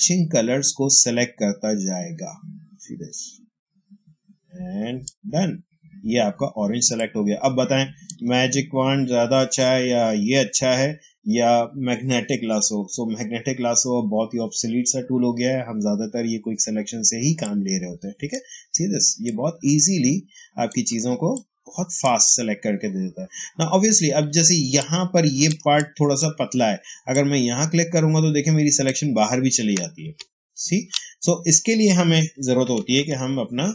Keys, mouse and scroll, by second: 6.5 space, 6.8 click, 7.0 space, 17.3-19.1 drag, 19.3-21.0 drag, 21.0 space, 21.2 click, 21.5 space, 24.0 ctrl+space, 24.7 ctrl+click, 24.8 ctrl+space, 25.6 click, 25.9 space, 27.0-30.0 drag, 29.9 ctrl+z, 32.4-33.6 typing.